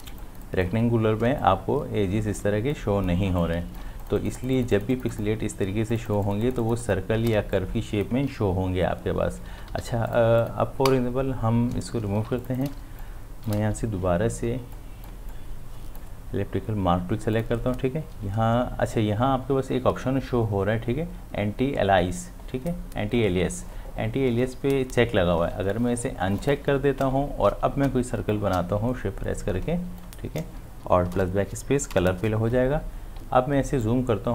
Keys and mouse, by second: 0.0 ctrl+alt+space, 0.2 click, 0.6 space, 1.4-4.0 ctrl+drag, 7.4 space, 7.6 click, 7.9 space, 9.5 ctrl+d, 9.7 v, 10.1 click, 12.3 space, 12.4 ctrl+click, 12.8 space, 13.0 click, 13.3 space, 14.8-17.4 drag, 26.4-33.2 drag, 33.2 ctrl+space, 33.8 ctrl+click.